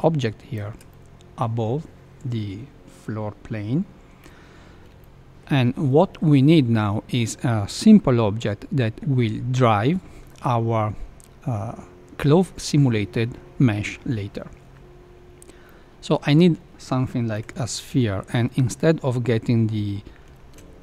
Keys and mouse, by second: 0.8-1.3 middle drag, 4.2 KP_1, 5.0-5.3 shift+middle drag, 15.6-16.5 middle drag, 17.3 KP_1, 20.3 shift+a.